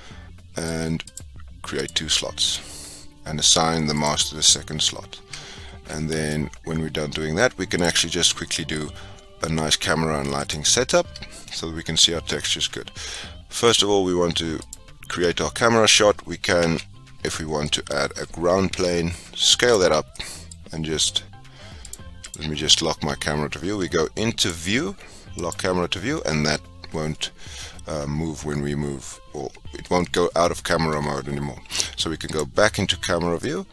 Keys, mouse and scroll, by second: 2.4-4.7 drag, 5.7 Tab, 7.7 click, 8.4-8.7 scroll down 1, 8.7-10.3 middle drag, 10.3 click, 13.1-14.6 middle drag, 14.6 click, 17.7 shift+a, 18.7 s, 19.9 scroll down 1, 20.1-22.3 middle drag, 22.3-26.9 drag, 30.8 n, 32.2 click, 33.4-33.7 middle drag.